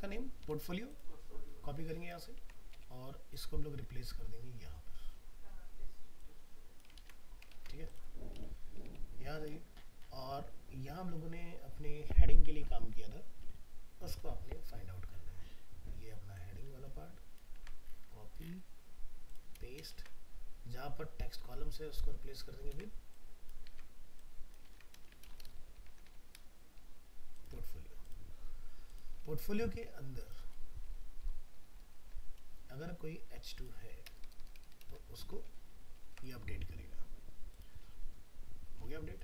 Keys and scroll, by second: 2.4 ctrl+c, 7.0 ctrl+v, 7.5 ctrl+s, 17.6 ctrl+c, 19.9 ctrl+v, 22.7 ctrl+c, 23.7 ctrl+v, 35.5 ctrl+s.